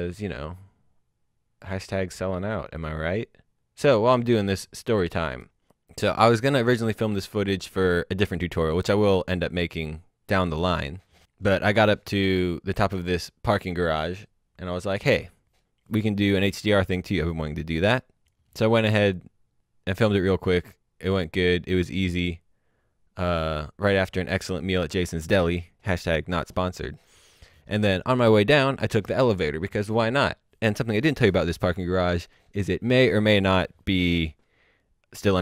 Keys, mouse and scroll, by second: 5.7 click, 17.5 click.